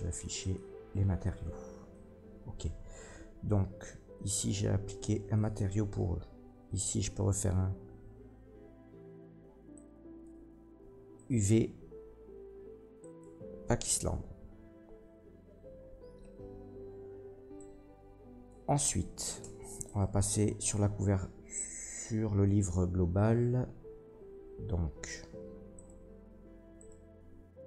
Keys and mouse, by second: 0.6-4.2 middle drag, 4.2-24.0 drag, 19.4 Tab, 19.8 middle click, 19.8 right click, 20.6 Tab, 21.6 Tab, 25.7 middle click, 26.7 middle click.